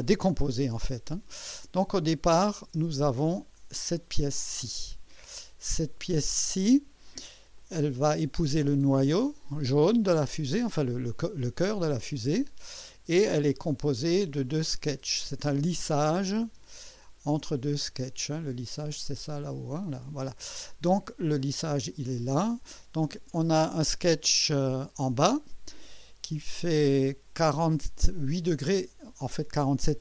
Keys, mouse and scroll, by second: 2.3 click, 2.7 space, 3.9 click, 4.5-7.4 drag, 7.6 click, 12.0-13.3 drag, 14.4 click, 14.9 scroll down 2, 16.0 click, 16.4 space, 16.9 click, 17.3 space, 21.6 click.